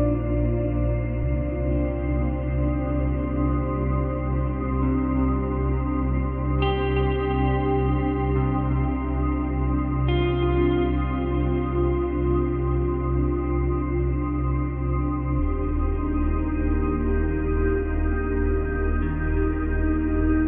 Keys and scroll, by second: 10.9 space, 13.5 space, 15.1 space, 18.7 space, 19.8 space.